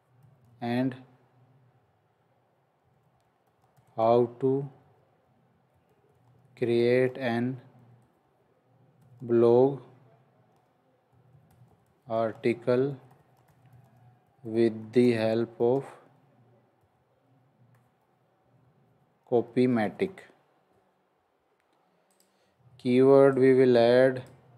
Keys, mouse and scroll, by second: 0.0-0.4 typing, 2.6-9.1 typing, 10.8-20.5 typing, 23.3 click, 23.4 click.